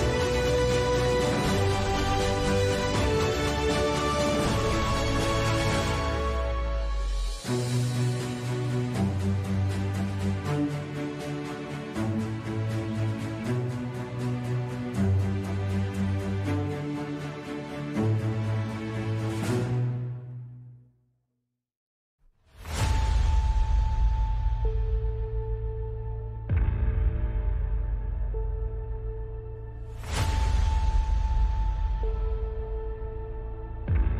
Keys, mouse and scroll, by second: 1.0 alt+s, 1.5 ctrl+z, 1.6 ctrl+z, 1.9 Tab, 2.3 alt+s, 3.1 ctrl+z, 3.3 Tab, 5.4 ctrl+KP_Divide, 6.2 ctrl+KP_Subtract, 7.1 ctrl+z, 7.8 z, 8.3 z, 8.8 ctrl+KP_Subtract, 9.1 ctrl+z, 10.0-10.3 drag, 10.3-10.8 middle drag, 10.8 z, 11.5-12.5 drag, 12.5-13.2 right drag, 13.2-13.6 middle drag, 13.6 z, 14.0 middle click, 15.0 middle click, 16.2 middle click, 19.0 ctrl+shift+KP_Subtract, 20.5 ctrl+KP_Subtract, 21.6 alt+c, 23.2 z, 23.3 z, 23.9 ctrl+KP_Subtract, 24.4 KP_Decimal, 25.5 KP_Decimal, 26.6 ctrl+z, 26.8 ctrl+z, 26.8 ctrl+z, 27.4 click, 28.1 ctrl+z, 28.2 ctrl+z, 28.4 ctrl+z, 28.6 ctrl+z, 28.9 click, 29.4 middle click, 31.0-31.6 middle drag, 31.8-32.1 middle drag, 32.1-32.5 drag, 32.5 Tab, 33.0 Tab, 33.3 ctrl+s.